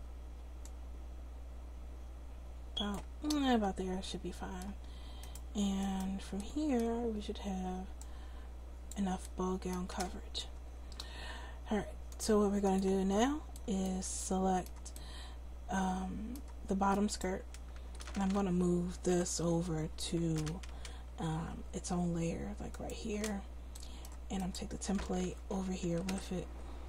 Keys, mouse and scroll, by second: 0.1 right click, 0.6-2.2 middle drag, 3.3 middle click, 9.1 click, 10.6 Tab, 17.1-18.8 right drag, 19.1 m, 24.4-26.8 drag, 26.1 m.